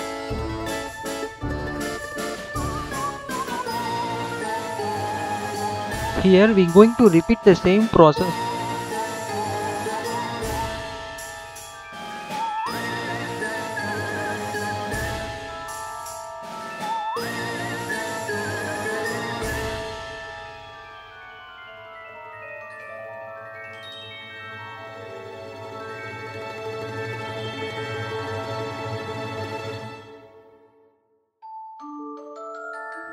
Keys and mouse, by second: 2.6 click, 3.4 click, 4.2 h, 5.7-12.6 drag, 12.8 click, 13.5-14.2 drag, 14.8 click, 15.1-15.6 drag, 16.7 h, 17.1-18.6 drag, 19.3-19.8 drag, 20.2-20.9 drag, 22.1 click, 22.3 h, 23.0-23.4 drag, 23.9-24.5 drag, 25.2-25.7 drag, 25.9 click, 26.4 h, 27.4-30.8 drag, 31.8 click.